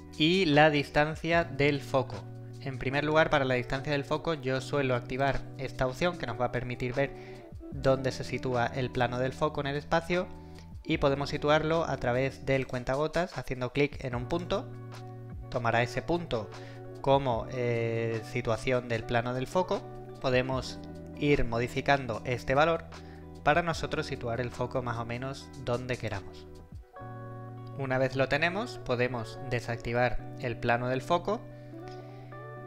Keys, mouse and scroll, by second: 1.5-2.4 right click, 2.1-3.4 s, 2.8 w, 5.2 click, 12.7 click, 20.2-26.2 drag.